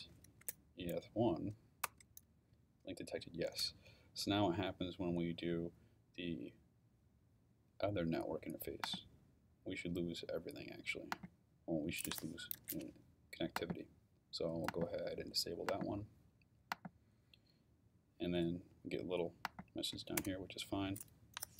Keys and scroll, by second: 0.0-0.9 typing, 1.8 Return, 20.2 Return.